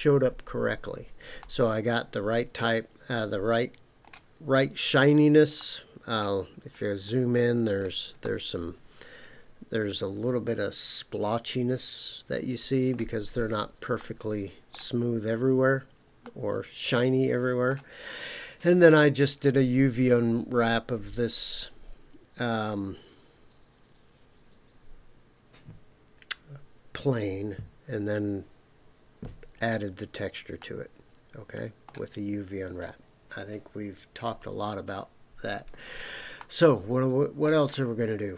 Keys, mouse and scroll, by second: 1.4-4.1 middle drag, 5.5 middle click, 6.5-7.8 scroll up 5, 8.2-13.0 middle drag, 13.3-14.0 scroll down 2, 14.0 middle click, 15.0-16.2 scroll down 2, 16.2-17.7 middle drag, 18.0-18.5 scroll down 2, 29.7-30.2 scroll down 2, 30.6-31.9 middle drag, 36.4-37.5 shift+middle drag, 37.7-38.3 middle drag.